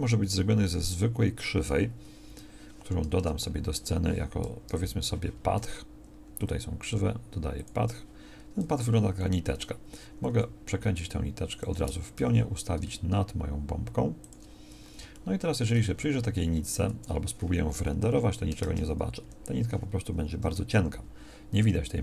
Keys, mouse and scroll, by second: 3.2 KP_0, 4.6 KP_1, 8.6 g, 10.3 r, 12.2 g, 18.6 KP_0.